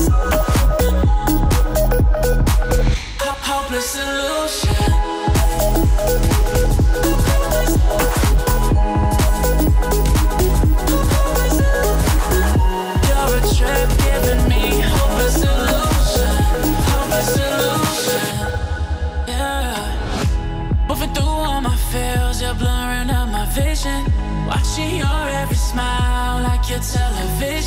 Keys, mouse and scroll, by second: 0.0-0.7 click, 1.1-1.5 alt+scroll down 1, 2.2 click, 5.2-5.7 alt+scroll down 1, 5.8 click, 6.2-6.6 alt+scroll up 1, 6.6 alt+click, 6.8 alt+scroll down 1, 7.2 click, 7.9 F7, 8.4 click, 8.7-9.5 alt+scroll down 1, 9.5 alt+scroll up 1, 10.0-10.6 drag, 14.1-14.5 alt+scroll up 1, 15.7 click, 16.5-16.9 alt+scroll up 1, 18.1 Down, 21.3 alt+scroll down 1, 22.1 alt+scroll up 1, 22.7 alt+scroll down 1, 23.9 click, 25.6 click, 26.5-27.6 alt+scroll up 2.